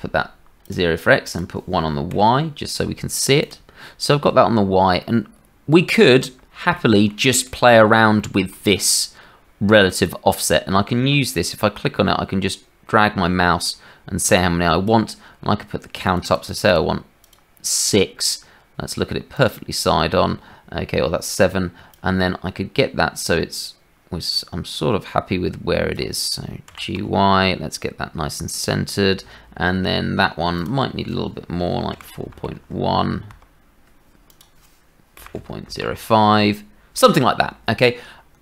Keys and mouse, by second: 1.3-3.5 middle drag, 5.0-6.1 middle drag, 6.7 shift+middle click, 7.4 middle click, 8.2 shift+middle click, 11.3-14.9 drag, 16.3 click, 16.5 click, 16.7 click, 16.7-19.4 middle drag, 19.4 click, 19.5-21.9 middle drag, 21.9-25.4 drag, 26.7 g.